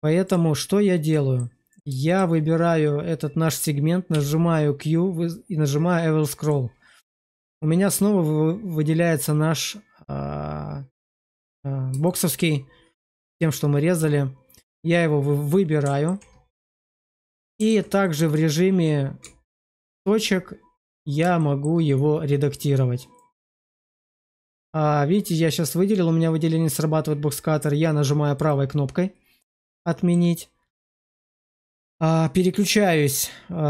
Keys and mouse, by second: 0.1 click, 1.0 middle click, 2.0 shift+middle click, 4.0 q, 11.9-12.3 shift+middle drag, 13.9 click, 15.4-15.9 middle drag, 16.6 shift+middle drag, 17.1 middle click, 17.9 shift+middle drag, 19.1 Tab, 21.3 shift+middle click, 23.1 click, 28.3 click, 29.7 shift+middle click.